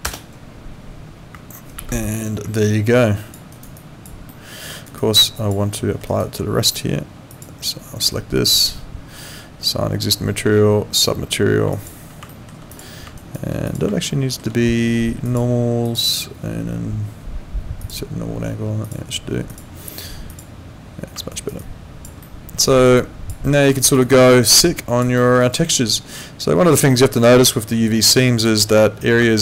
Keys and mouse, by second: 2.0 ctrl+4, 2.6 alt+click, 3.5 alt+right click, 3.8 alt+click, 4.3 alt+middle click, 4.9 alt+right click, 5.1 alt+click, 5.7 alt+middle click, 6.1 alt+right click, 7.3 click, 8.1 right click, 11.7 alt+click, 12.3 alt+middle click, 12.7 click, 13.2 alt+right click, 13.7 click, 14.1 alt+middle click, 15.3 click, 17.8 click, 21.3 alt+right click, 21.6 alt+click, 22.2 alt+middle click, 22.7 alt+right click, 22.9 alt+click, 23.5 alt+middle click, 23.8 alt+right click, 24.0 alt+click, 25.2 alt+middle click, 25.4 alt+right click, 25.9 alt+click, 26.9 alt+middle click, 27.2 alt+click, 27.7 alt+middle click, 28.1 alt+right click.